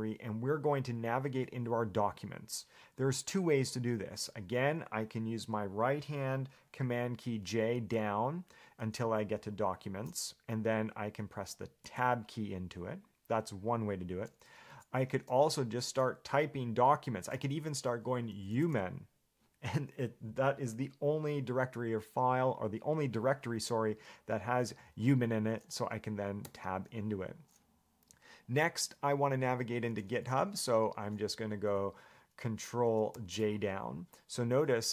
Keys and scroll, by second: 8.0 ctrl+j, 9.0 ctrl+j, 12.0 Tab, 14.9 BackSpace, 18.3-19.4 typing, 26.6 Tab, 33.3 ctrl+j.